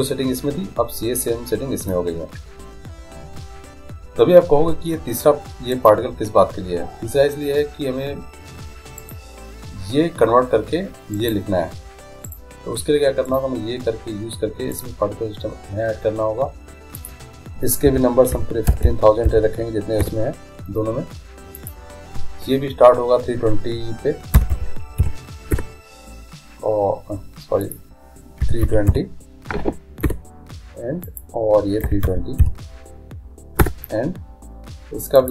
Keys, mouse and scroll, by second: 5.7-7.4 right drag, 9.0-10.8 right drag, 11.2-15.1 right drag, 14.7-16.5 drag, 17.0-18.7 drag, 18.8 0, 21.5-23.4 drag, 27.6-29.5 drag, 31.0-32.9 drag, 35.2-35.3 drag.